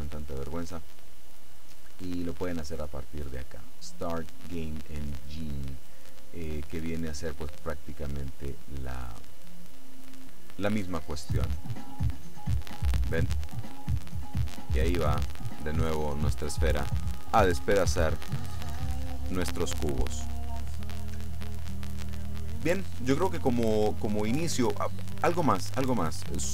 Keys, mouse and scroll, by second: 11.8 click, 18.8 Escape.